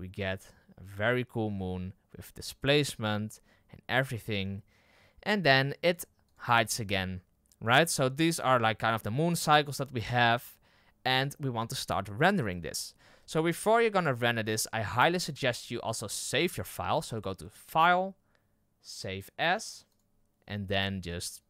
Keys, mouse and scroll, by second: 6.2-21.4 drag.